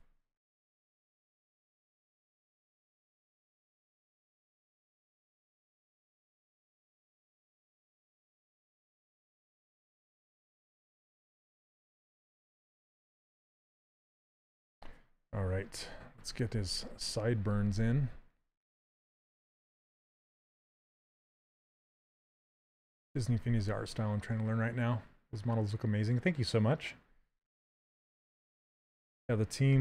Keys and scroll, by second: 1.0 s, 6.7 s, 17.4 s.